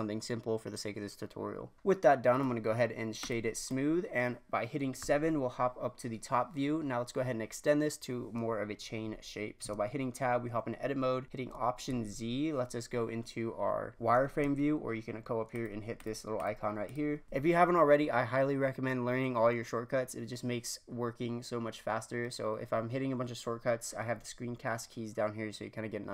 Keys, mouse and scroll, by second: 1.7 middle click, 1.8-2.3 scroll up 2, 2.3 right click, 3.6-5.0 middle drag, 5.0 KP_7, 5.9-7.8 scroll up 2, 9.6 Tab, 11.9 alt+z, 14.4 alt+z, 15.5 click, 17.2 alt+z.